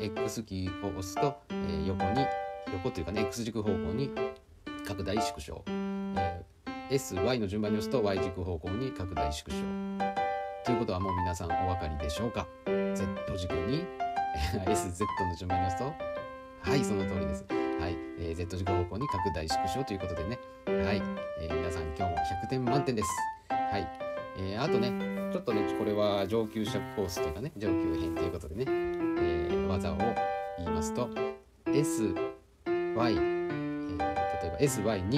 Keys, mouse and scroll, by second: 0.0 s, 6.5 s, 10.0-12.3 middle drag, 13.2-13.8 middle drag, 14.5-15.0 middle drag, 15.7-16.0 drag, 16.7 s, 22.1 click, 22.8-24.0 middle drag, 25.3-26.6 drag, 27.0-27.6 middle drag, 29.4 g, 30.8-31.9 middle drag, 33.8 middle click, 34.8 middle click.